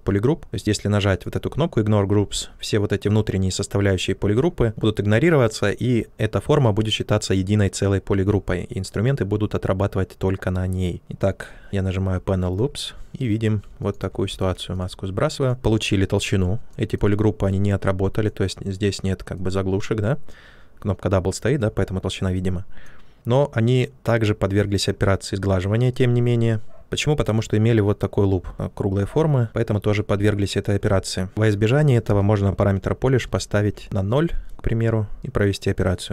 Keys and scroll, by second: 29.4 ctrl+z, 33.2 0, 33.6 Return.